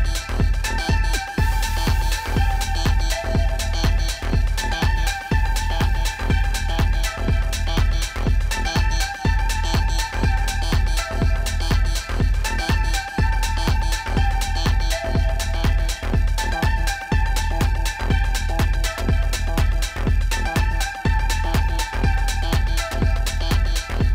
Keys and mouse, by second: 1.8 click, 4.0-5.7 typing, 6.8 ctrl+z, 10.0 ctrl+z, 10.6 click, 15.6 z, 16.2 click, 16.9-17.4 typing.